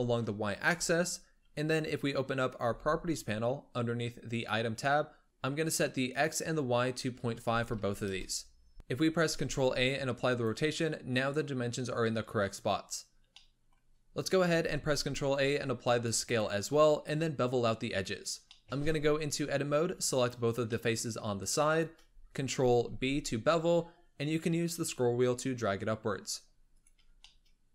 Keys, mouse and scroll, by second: 2.5 n, 4.2 click, 5.2-6.0 scroll up 3, 6.0-8.7 drag, 8.7 ctrl+a, 9.2 ctrl+a, 13.2-13.9 middle drag, 13.9-14.4 scroll up 2, 14.4 ctrl+a, 17.7 Tab, 18.4-19.7 middle drag, 19.7 3, 20.0 click, 20.6 middle click, 21.6 shift+click, 22.8 ctrl+b, 26.9 Tab, 27.2-27.7 middle drag.